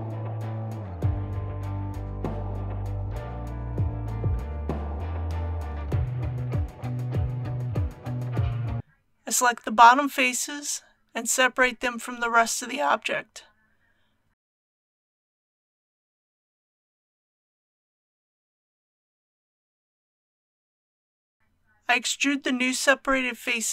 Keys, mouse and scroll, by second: 2.7 alt+a, 4.2-7.3 middle drag, 8.7 KP_1, 8.8 Return, 9.1-10.6 middle drag, 11.7 c, 12.2 click, 12.7 right click, 15.9 p, 16.5 click, 19.2-20.0 typing, 20.3 Return, 21.4 click, 21.9 Tab, 23.3 a.